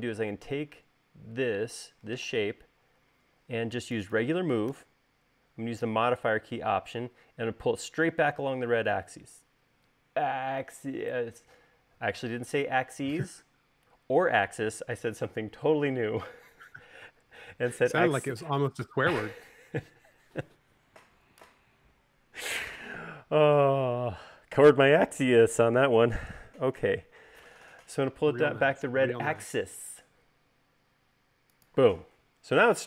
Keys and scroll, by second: 2.6 m.